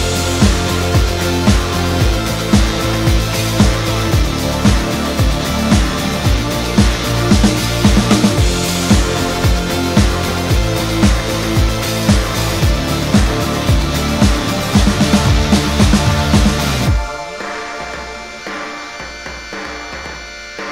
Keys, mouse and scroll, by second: 0.0 g, 0.1 g, 2.1 shift+click, 4.0 m, 4.8 double click, 5.0 middle click, 5.1-5.5 scroll up 1, 5.5 Tab, 7.9 Tab, 8.1 scroll down 6, 8.3 middle click, 9.5 shift+right click, 9.8 scroll down 1, 10.1 middle click.